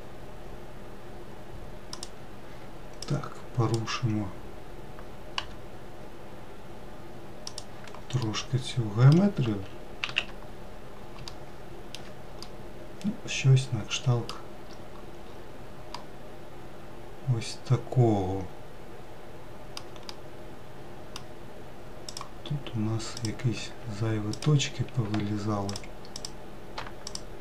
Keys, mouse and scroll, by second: 2.9 click, 5.3 g, 8.1-9.9 middle drag, 9.9 alt+z, 10.4-11.2 scroll down 2, 11.2 alt+middle click, 12.3-14.6 middle drag, 14.6-15.8 scroll up 4, 15.8-18.9 middle drag, 19.9-21.9 middle drag, 21.9 click, 23.0 click, 24.2 ctrl+click, 25.6 click, 26.0 click, 26.9 shift+click.